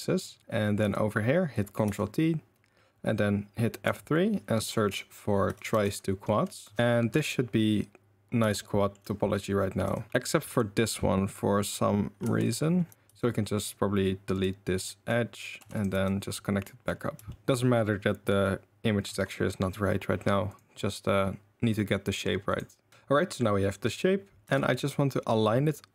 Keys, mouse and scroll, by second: 0.4 1, 0.8 a, 1.8 ctrl+t, 3.9 F3, 8.5 shift+middle click, 9.8 2, 10.1 ctrl+z, 10.5 click, 12.2 1, 12.5 click, 12.9 g, 12.9 ctrl+x, 12.9 ctrl+z, 12.9 g, 12.9 2, 15.6 2, 15.9 f, 17.3 shift+middle click, 19.2 shift+middle click, 20.5 click, 22.9 Tab, 24.4 r.